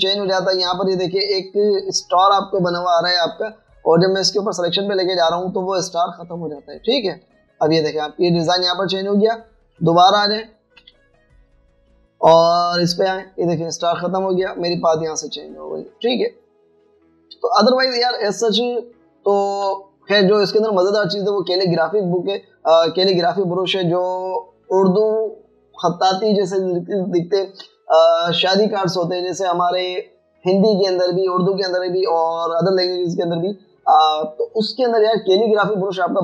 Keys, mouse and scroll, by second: 11.5-11.9 alt+scroll down 1, 11.9 b, 12.5 b, 12.7 alt+scroll up 1, 18.4 v.